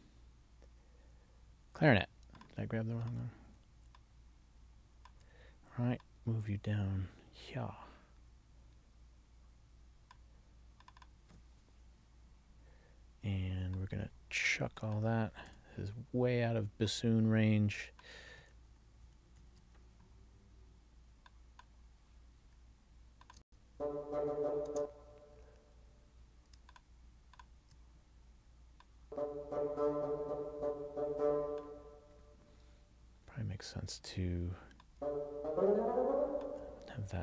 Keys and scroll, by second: 18.8 alt+shift+Down, 23.5 space, 24.8 space.